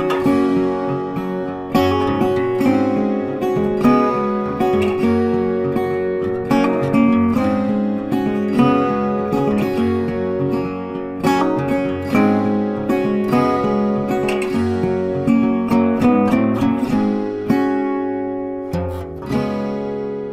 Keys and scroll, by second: 11.1 ctrl+t.